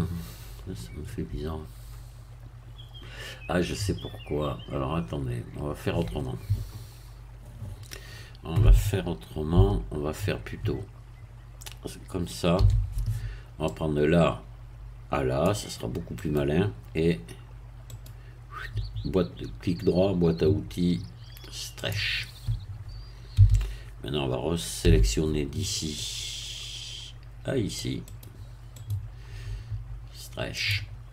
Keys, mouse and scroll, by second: 9.5 a, 12.6 c, 13.7-15.6 drag, 16.2 right click, 17.9 right click, 18.8-21.6 middle drag, 21.8 click, 23.4 a, 24.8 c, 26.0-28.0 drag, 28.1 right click, 28.8 right click, 30.6 click.